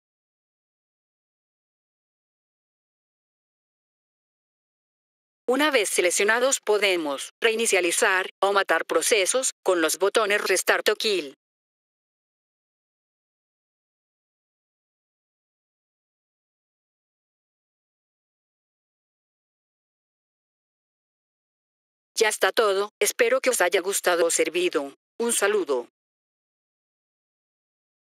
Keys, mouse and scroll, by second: 4.9 F3, 5.2 click, 12.8 click, 21.6 F3, 22.0 click.